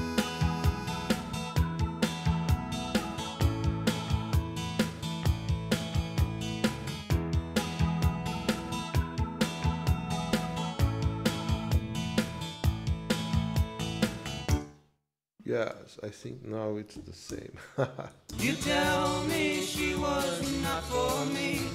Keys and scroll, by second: 14.5 space, 17.0 q, 17.3 Return, 18.4 space, 20.7 j.